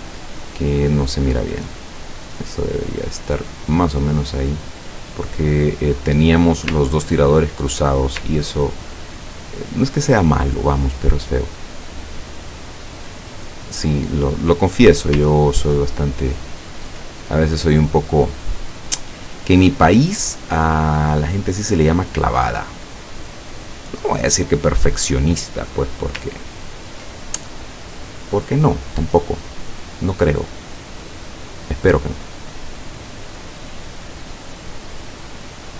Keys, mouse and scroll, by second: 0.6-3.5 drag, 3.9-6.1 drag, 7.0-7.6 ctrl+scroll down 2, 9.1 ctrl+scroll down 2, 12.5 click, 13.8 click, 15.2-16.1 scroll down 4, 16.5-17.0 ctrl+scroll up 4, 17.3 ctrl+click, 19.2 click, 20.1 click, 22.1-24.3 drag, 26.6 ctrl+scroll down 2, 29.8 click, 32.3-35.7 drag.